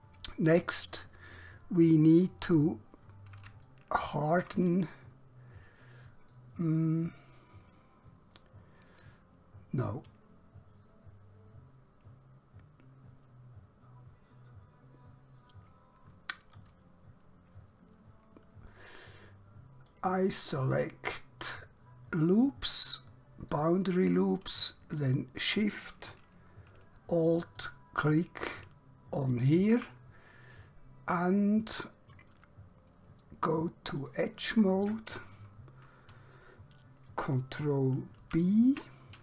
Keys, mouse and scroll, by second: 2.8 scroll up 1, 3.8 shift+middle click, 4.9 middle click, 19.9 click, 23.5 click, 27.6 alt+shift+click, 34.0 click, 37.5 ctrl+Num_Lock, 38.4 ctrl+b.